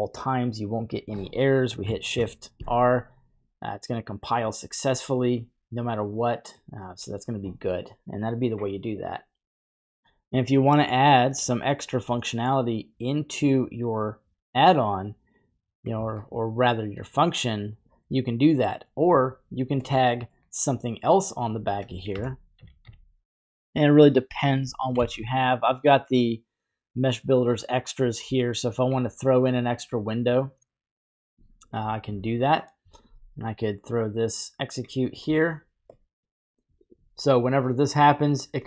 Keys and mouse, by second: 2.1 shift+r, 3.9 typing, 6.3 middle click, 10.6 middle click, 13.6 click, 13.8-15.9 drag, 15.9 typing, 16.5-18.7 middle drag, 19.9 middle click, 22.1 shift+a, 24.1 middle click, 24.9 shift+a, 33.0 typing, 33.8-34.9 drag, 35.2 middle drag, 36.0 middle click.